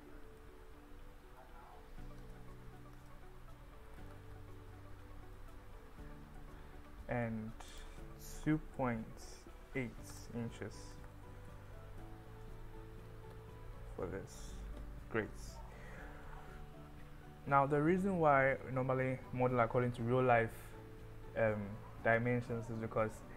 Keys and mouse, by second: 2.7 BackSpace, 7.8-12.6 drag, 13.4-15.4 drag.